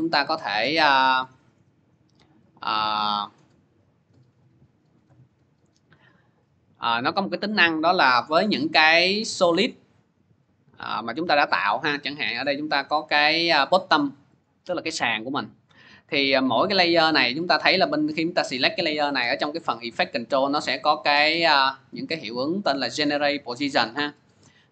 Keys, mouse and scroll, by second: 6.2 click, 6.7 click, 10.7 click, 12.7 click, 14.3 click, 16.9 click, 17.4 click, 18.5 click, 21.0 click, 21.8 click, 22.6 click, 23.4 click.